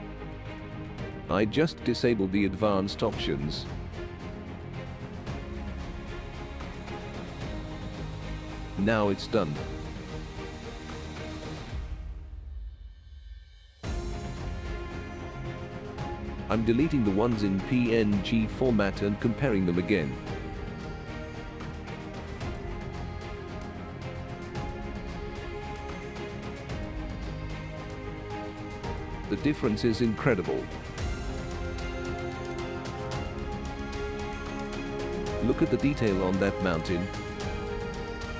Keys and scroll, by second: 19.4 Delete.